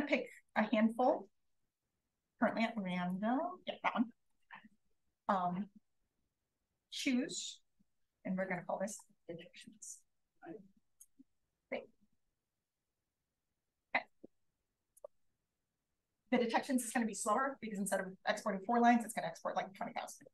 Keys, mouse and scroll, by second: 6.8-7.9 drag, 15.0 click.